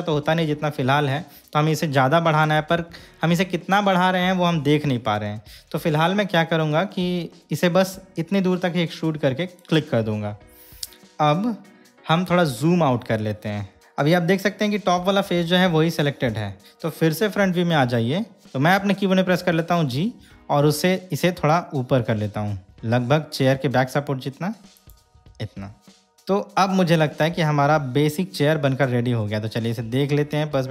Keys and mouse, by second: 9.7 click, 13.9-15.1 middle drag, 17.5 KP_3, 18.4 Escape, 19.5 g, 25.0 click, 26.0 KP_3, 29.9-30.7 middle drag.